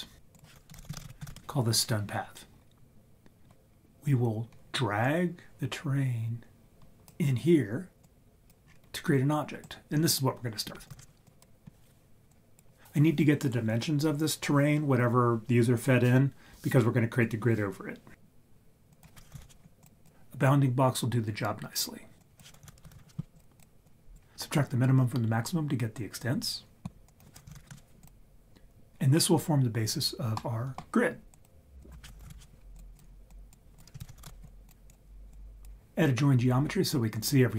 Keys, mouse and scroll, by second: 0.3 click, 5.0 click, 8.2 click, 8.6-9.6 scroll up 3, 9.6 click, 10.8 click, 10.9 ctrl+x, 11.2 click, 12.4 click, 18.9-19.9 drag, 20.0 drag, 22.4-23.4 drag, 23.6 click, 23.8-24.2 drag, 27.1 click, 28.0-29.2 drag, 30.4 middle click, 31.3 click, 31.9-32.8 drag, 32.9 click, 33.3 click, 33.7 click, 34.0 shift+a, 35.3-35.7 drag.